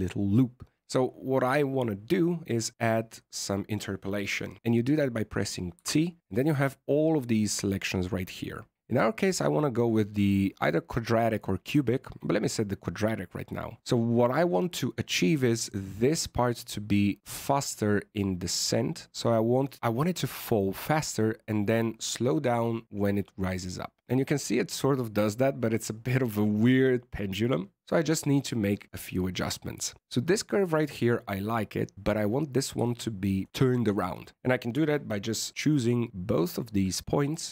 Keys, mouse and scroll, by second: 5.7 t, 14.8 click, 20.1 alt+a, 27.8 alt+a, 28.6 click, 30.0 right click, 31.9 right click, 33.4 shift+right click, 35.9-36.3 scroll up 6, 36.3 middle click, 37.3 right click.